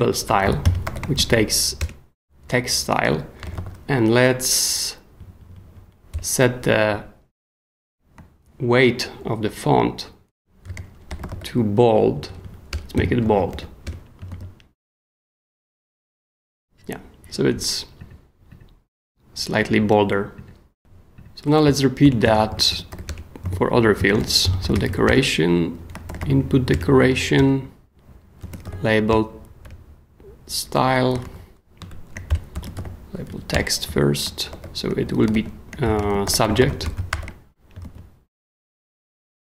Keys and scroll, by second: 0.0-1.7 typing, 1.8 shift+Return, 2.4 Return, 3.2-4.0 typing, 5.2 Down, 6.1 Return, 10.4-14.0 typing, 12.1 Down, 12.7 Return, 14.3 super+s, 21.6 k, 22.0 BackSpace, 22.5 super+k, 22.7 l, 23.0 Return, 23.9-26.7 typing, 28.2-29.6 typing, 31.2 alt+shift+Left, 32.3 alt+shift+BackSpace, 32.3-37.6 typing, 33.3 Down, 33.5 Return, 37.7 shift+super+t, 37.8 shift+super+s, 38.3 super+s.